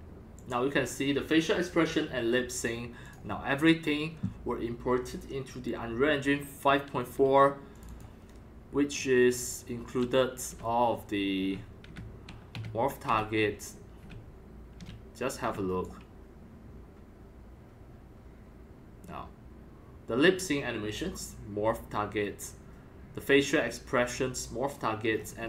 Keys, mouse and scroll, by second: 0.3-1.5 drag, 3.0 click, 7.7 click, 7.8 click, 8.9-9.5 scroll up 5, 9.5 scroll down 3, 10.0 right click, 10.4-15.5 typing, 10.5 middle click, 12.5-14.2 right drag, 15.6-17.0 right drag, 17.0-17.6 drag, 18.3 drag, 18.6-19.5 drag, 19.9-20.8 right drag, 25.1-25.4 scroll down 9.